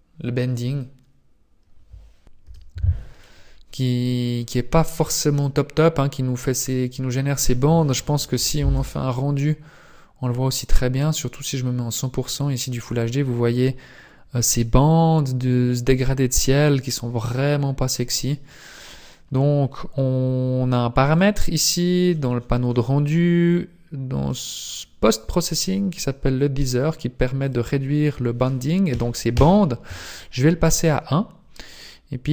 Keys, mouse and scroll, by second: 4.8 scroll up 1.